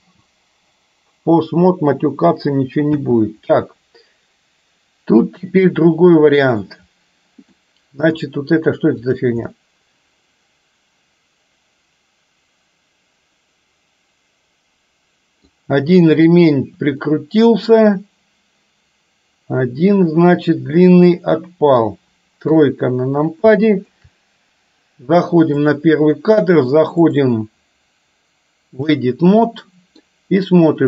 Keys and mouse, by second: 0.1 space, 3.0 space, 3.5-6.7 middle drag, 7.7-8.2 middle drag, 9.1 click, 9.6-15.6 middle drag, 17.1-21.8 middle drag, 22.5 KP_3, 23.7 shift+middle drag, 25.6 click, 27.1-29.0 drag, 29.6 middle click.